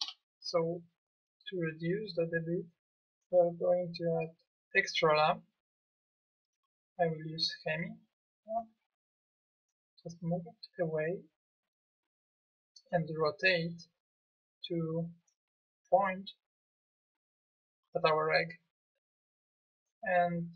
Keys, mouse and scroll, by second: 0.0 Escape, 4.7-7.2 drag.